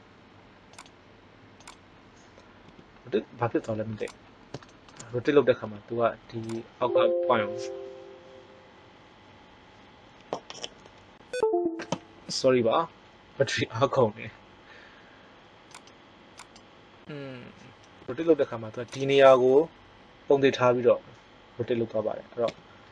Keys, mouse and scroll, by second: 2.6 r, 5.6 r, 15.7-16.9 right drag, 18.0 r, 22.5 t.